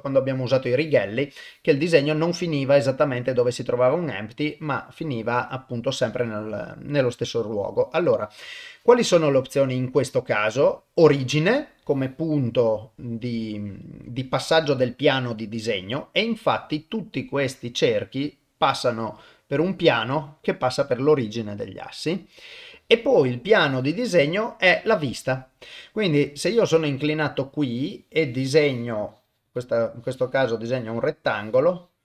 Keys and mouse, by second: 1.9-3.3 middle drag, 4.3 middle click, 5.7 middle click, 16.1-22.7 middle drag, 25.7-27.3 middle drag, 28.2-32.0 drag.